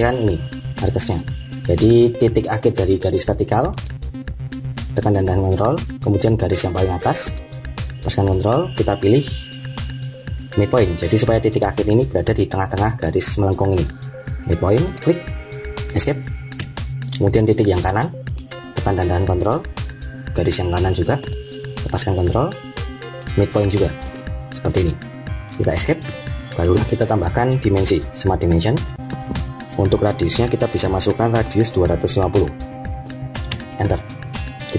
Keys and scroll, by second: 15.8 Escape, 25.4 Escape, 33.4 Return.